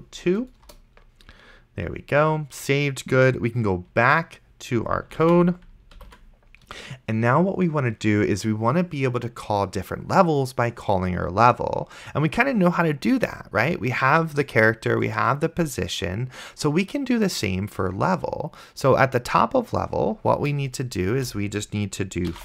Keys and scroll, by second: 0.0-0.4 typing, 0.7 Return, 5.5 ctrl+s, 6.3 ctrl+super+Left, 21.5 Return, 22.0-22.4 typing.